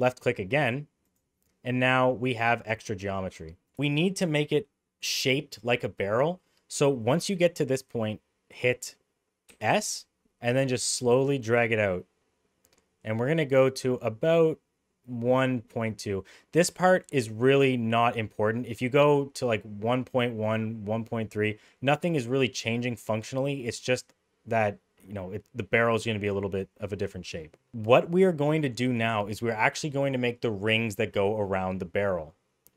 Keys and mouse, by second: 1.9-3.0 middle drag, 3.4 middle click, 7.0 middle click, 9.5 s.